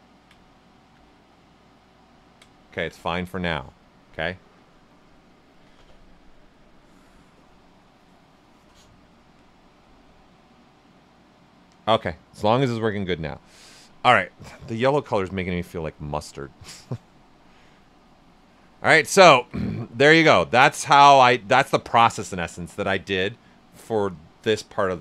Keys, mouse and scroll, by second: 0.5 alt+right click, 14.4 click, 15.3-19.1 shift+drag, 19.1 ctrl+right click, 20.5 right click, 21.5 alt+right click.